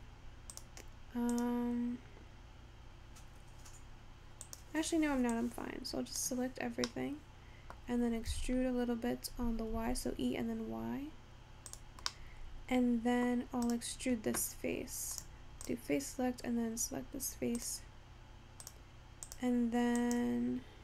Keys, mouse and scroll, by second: 0.6 click, 1.4 click, 4.5 click, 5.4 click, 7.0-8.4 middle drag, 8.4 e, 12.1 scroll down 1, 12.2-13.5 middle drag, 13.5 scroll up 1, 13.8 click, 15.3 click, 15.8 click, 17.8 click, 18.8 click, 19.3 click.